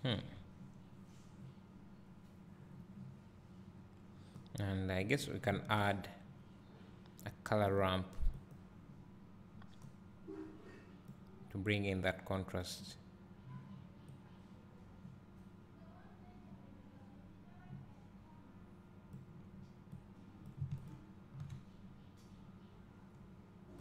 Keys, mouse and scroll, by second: 4.5 click, 9.9-20.5 drag, 21.0 ctrl+shift+click.